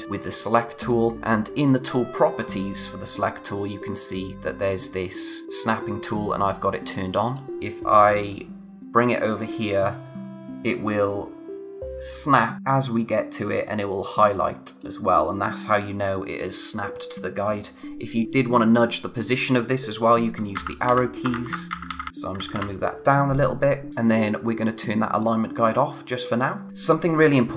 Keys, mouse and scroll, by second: 7.2 click, 20.5 Down, 23.9 click, 25.1 click.